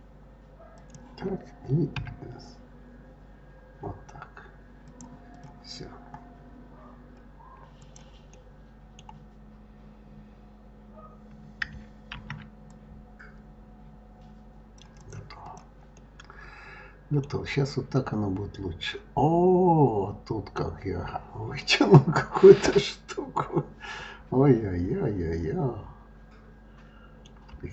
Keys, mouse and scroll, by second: 2.0 s, 5.3 click, 7.8 click, 8.3-11.3 middle drag, 12.1 ctrl+r, 15.4 click, 16.0-17.3 middle drag, 17.3-17.9 scroll down 2, 17.9-20.9 middle drag, 21.6-24.6 middle drag.